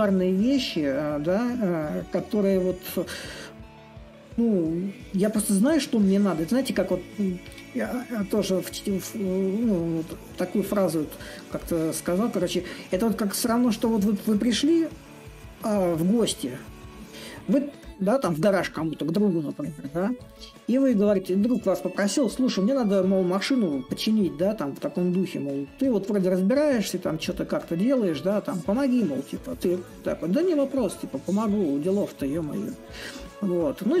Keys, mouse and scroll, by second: 4.2 s, 6.1-7.8 drag, 7.8 s, 9.4-14.4 drag, 15.9-20.9 drag, 22.0-24.2 drag, 24.2 a, 27.0-31.4 drag, 32.2-34.0 drag.